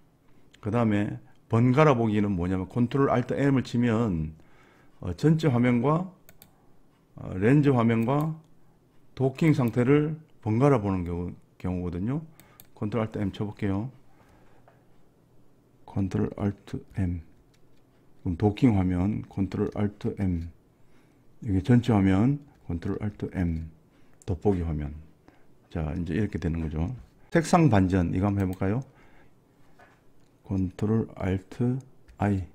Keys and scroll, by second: 17.0 ctrl+alt+m, 20.1 ctrl+alt+m, 23.2 ctrl+alt+m.